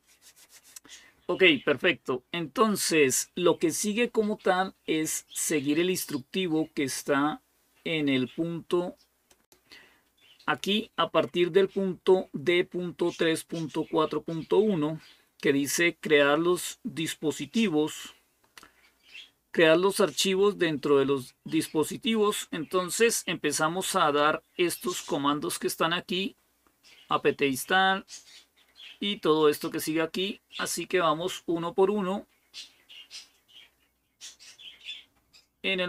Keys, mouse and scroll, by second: 9.1 click, 9.5 middle click, 23.6-25.3 scroll down 1, 35.7 click.